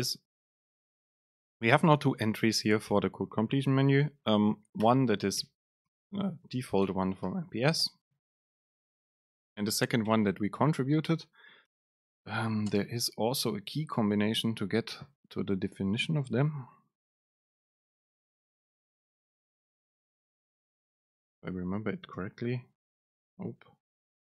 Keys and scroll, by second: 1.6 super+space, 5.5 BackSpace, 6.1 Return, 6.7 Up, 7.0 BackSpace, 7.3 Return, 8.0 super+space, 10.2 BackSpace, 11.8 Return, 12.8 super+space.